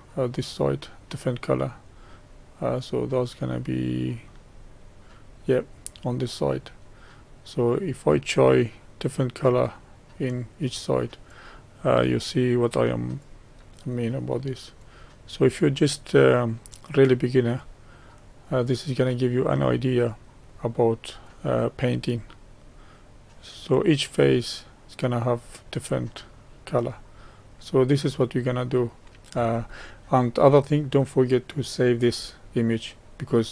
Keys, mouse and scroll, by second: 2.8-7.6 middle drag, 8.8-24.8 drag, 24.8-31.4 middle drag.